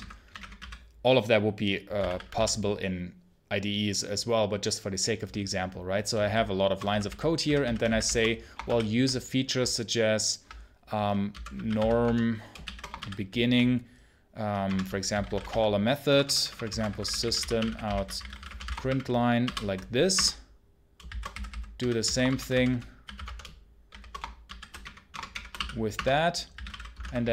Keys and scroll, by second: 0.0-2.2 typing, 6.1-8.5 typing, 14.5 BackSpace, 16.0 BackSpace, 20.0 Return, 22.1 shift+;, 25.0 BackSpace, 25.8 Return.